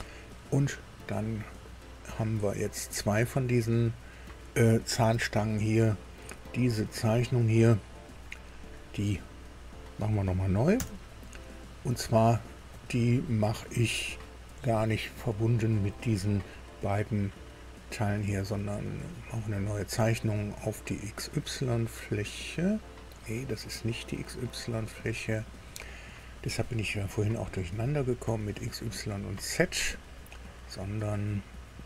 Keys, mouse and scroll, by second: 2.3 click, 3.4 click, 9.5 click, 10.7 Delete, 12.7 click, 19.2 click, 20.8 click, 30.4-31.8 middle drag.